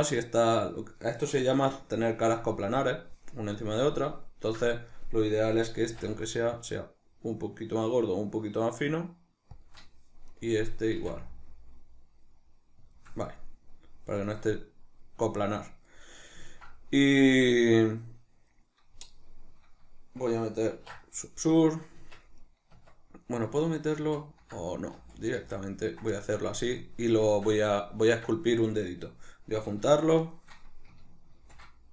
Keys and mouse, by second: 4.7 right click, 5.1-9.7 middle drag, 5.8 s, 9.7 shift+click, 10.3 right click, 10.9 s, 13.0 shift+click, 13.4-16.1 middle drag, 16.1 right click, 16.5-22.0 ctrl+middle drag, 20.7 ctrl+2, 22.0 Tab, 24.1 ctrl+z, 26.2 middle click, 27.3-29.9 shift+middle drag, 29.9 shift+right click, 30.2 shift+right click, 31.4 ctrl+shift+b.